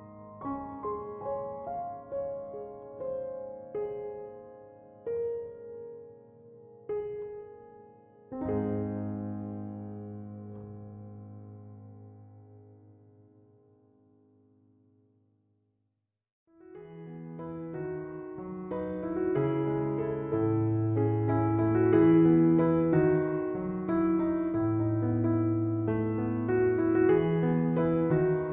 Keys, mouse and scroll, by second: 2.3 Return, 14.7 1, 14.9 2, 15.2 0, 15.4 Return.